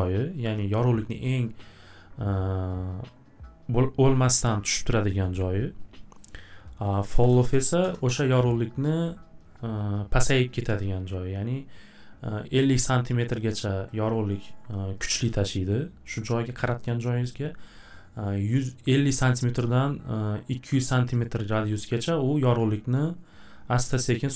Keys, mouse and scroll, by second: 6.9 click, 6.9-7.8 typing, 7.1 click, 13.9-18.9 drag, 21.1 click.